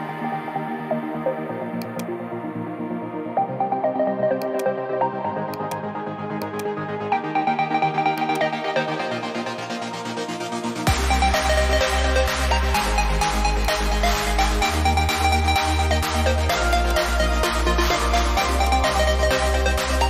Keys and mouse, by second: 0.9 click, 4.3 alt+click, 5.5 click, 6.4 shift+click, 8.1 click, 13.6 click, 16.6 click.